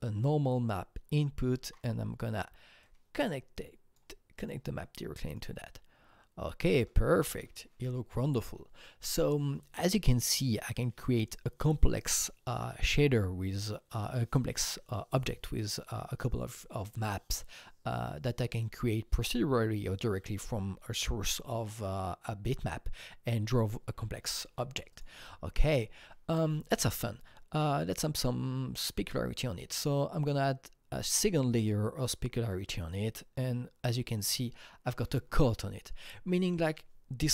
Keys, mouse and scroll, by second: 1.1-1.5 scroll down 4, 1.6 alt+Tab, 2.8-4.4 drag, 5.3-11.3 drag, 24.9 click, 25.0 click, 25.2-25.9 scroll up 5, 26.3-26.9 scroll up 1, 29.1-30.4 drag, 29.1 scroll up 1, 32.8-35.4 drag, 32.8 scroll up 1.